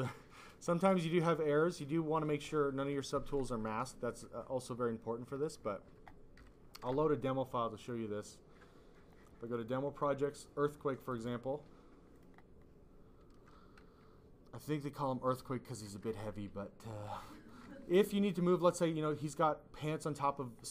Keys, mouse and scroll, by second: 0.2 click, 0.6 click, 1.0 alt+click, 1.3 click, 2.7 click, 3.7 alt+click, 4.0 click, 6.3 ,, 7.7 click, 9.0 click, 9.4 click, 9.6 double click, 10.9 double click, 11.6 double click, 12.1 double click, 16.2 click, 17.4 alt+click, 17.6 click.